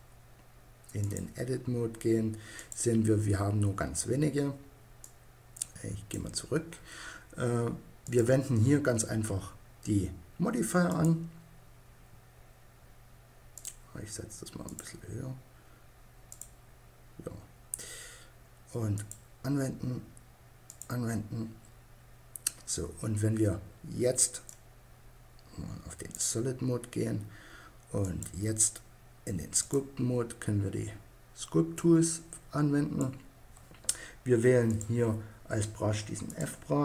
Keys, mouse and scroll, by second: 5.5 click, 6.2-7.4 middle drag, 7.4-9.2 drag, 9.2-10.2 middle drag, 10.2-11.7 drag, 11.9-13.0 middle drag, 17.4 middle click, 21.9-23.8 middle drag.